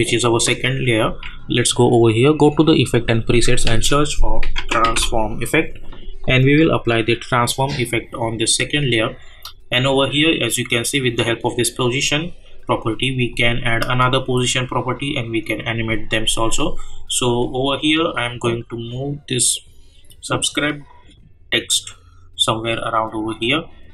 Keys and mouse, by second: 1.0 k, 2.2 click, 3.7 ctrl+a, 4.2-5.4 typing, 6.7 click, 10.4 click, 17.9-23.9 drag.